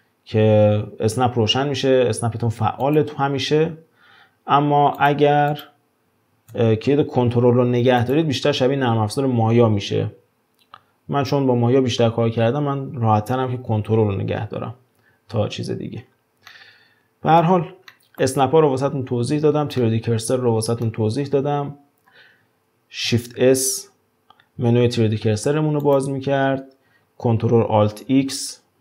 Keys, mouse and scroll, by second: 2.8 click, 3.4 g, 5.6 click, 6.5 shift+Tab, 8.0 click, 15.6-16.0 scroll down 2, 16.0-16.5 scroll up 5, 16.5-18.4 middle drag, 18.4 scroll down 1, 19.1-19.8 scroll down 5, 19.8-21.2 middle drag, 21.2 scroll down 2, 22.1-22.4 scroll up 2, 23.3 shift+s, 28.0 ctrl+alt+x.